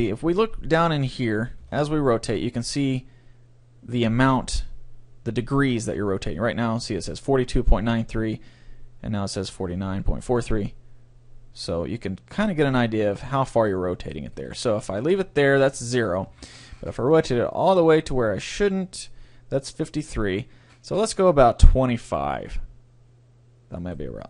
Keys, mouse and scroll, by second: 1.8 r, 13.3-15.1 right drag, 13.7-15.5 middle drag, 14.3 r, 23.9-24.2 right drag.